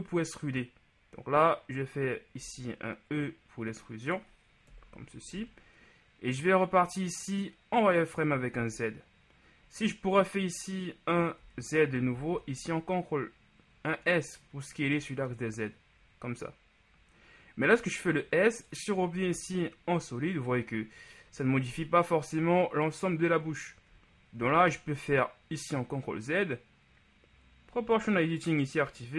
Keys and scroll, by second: 2.5 e, 4.7 KP_1, 5.5 z, 8.7 z, 11.6 z, 12.2 s, 12.5 z, 19.2 z, 24.4 ctrl+z.